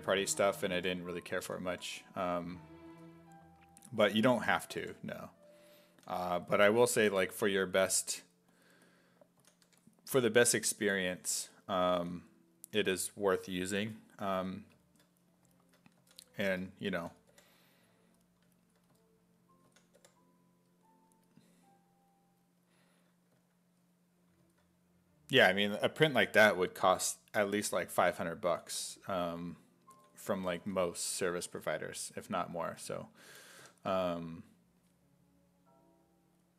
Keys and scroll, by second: 0.5 s, 0.8 5, 1.5 s, 1.7 5, 2.9 s, 4.8 5, 6.0 s, 6.3 1, 6.8 s, 7.1 1, 9.4 s, 9.7 1, 12.0 s, 16.0 s, 17.0 s, 17.3 5, 18.9 s, 19.7 s, 20.0 5, 23.4 s, 28.5 s, 29.7-31.6 typing, 33.3 b.